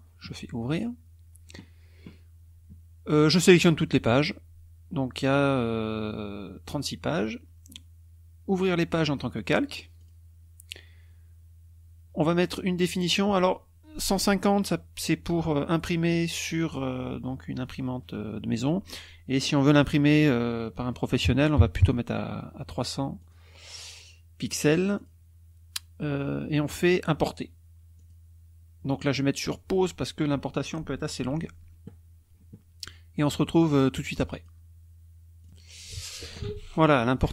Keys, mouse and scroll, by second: 0.7 click, 3.6 click, 9.3 click, 9.9 click, 12.7 click, 21.2 KP_3, 21.5 KP_0, 23.1 click, 24.9 click, 27.9 click, 34.3 click, 35.4 click.